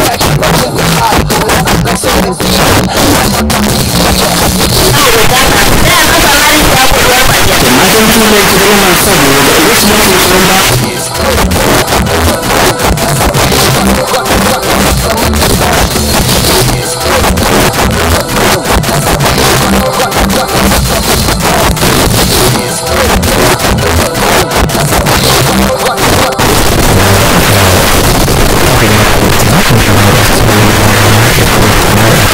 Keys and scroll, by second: 0.1 Return, 0.7 m, 1.0 Down, 1.2 Down, 1.3 Down, 1.6 Return, 10.7 Page_Down, 32.2 space.